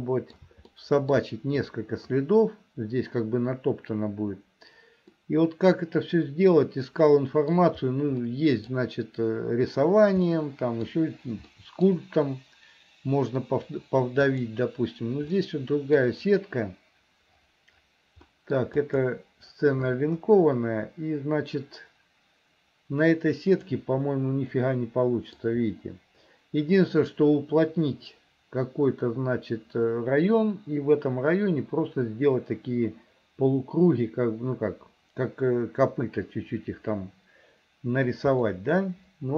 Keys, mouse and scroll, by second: 0.8 shift+middle click, 5.3-7.6 middle drag, 8.3 middle click, 10.4 middle click, 11.5 middle click, 14.3 click, 15.4 middle click, 18.3 middle click, 18.8 click, 23.7 click, 24.6 middle click, 38.5-39.3 middle drag.